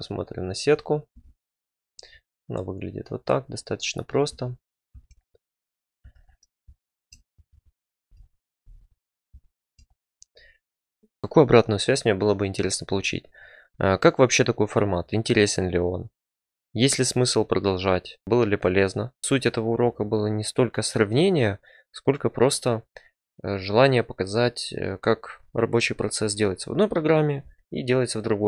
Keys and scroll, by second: 1.1 Tab, 4.3 Tab, 4.9 Tab, 6.0 Tab.